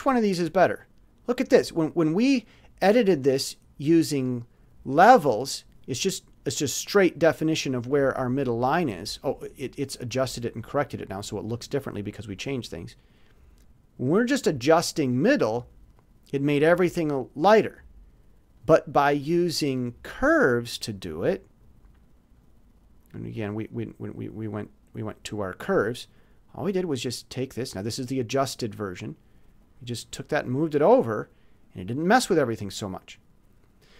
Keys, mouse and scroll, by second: 0.4 click, 2.3 click, 4.2 click, 5.2 click, 7.5-9.3 drag, 14.0-15.5 drag, 15.9 click, 18.5 click, 19.1 click, 19.8 click, 23.7 click, 25.4 click, 29.2-30.8 drag, 32.9 click.